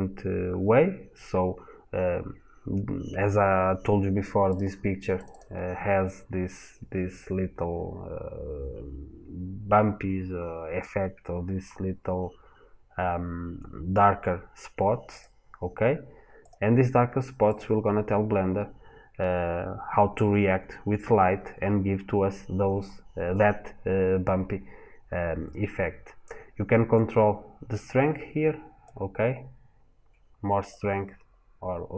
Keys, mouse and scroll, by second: 17.4 click, 30.5 click.